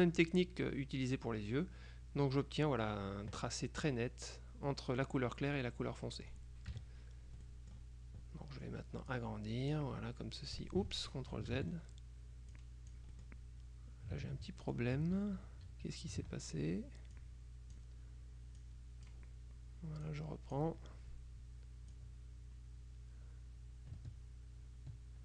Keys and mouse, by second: 6.1 click, 6.8 KP_Subtract, 7.5 click, 9.2-10.4 drag, 11.6 ctrl+z, 12.6-13.8 drag, 14.7 ctrl+click, 15.2 ctrl+z, 17.2-18.3 drag, 18.7-19.7 drag, 20.1-21.2 drag, 22.0-25.2 drag.